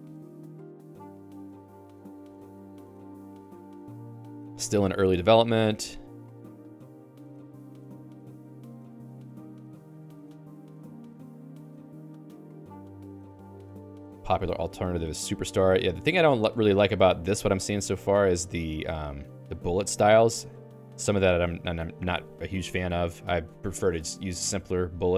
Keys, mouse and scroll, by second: 0.3 ctrl+d, 16.3 ctrl+d, 17.1 Escape, 17.8 ctrl+u, 18.2 ctrl+u, 18.6 ctrl+u, 19.1 ctrl+u, 19.7-21.3 typing, 22.1 Escape, 22.3 k, 22.6 k, 22.6 k, 22.8 k.